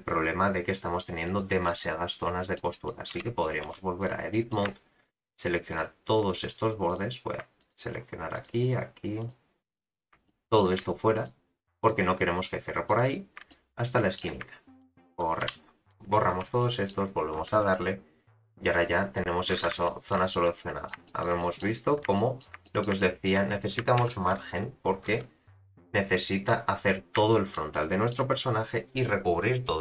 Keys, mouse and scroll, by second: 1.2-1.7 middle drag, 2.5-3.1 middle drag, 3.1 Tab, 3.6 2, 4.0 click, 4.3 middle click, 5.1 shift+click, 5.7 shift+click, 6.9 click, 7.6 shift+click, 8.3 shift+click, 9.2 shift+click, 9.9 shift+click, 10.2 middle click, 11.1 shift+click, 11.8 shift+click, 12.9 shift+click, 13.5 middle click, 14.8 shift+click, 15.4 x, 16.3 Tab, 16.6 middle click, 17.4 space, 19.6 space, 19.8 shift+middle drag, 20.3-20.9 middle drag, 21.0 shift+middle click, 21.4 middle click, 21.8-22.1 scroll up 5, 22.1 shift+middle drag, 22.6 middle drag, 23.0-23.3 shift+middle drag, 24.0 shift+Left, 25.0 space, 26.5 space, 26.8-27.1 scroll down 4, 27.3 shift+middle drag, 27.7-28.5 middle drag, 28.5-29.8 scroll up 1.